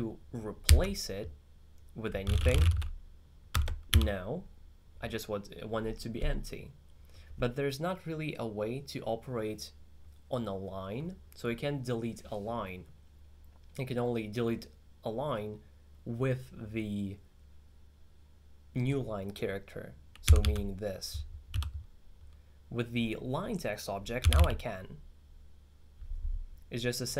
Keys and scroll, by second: 0.7 shift+s, 2.1-3.2 typing, 20.3 d, 20.5 d, 21.6 u, 24.0-24.9 typing.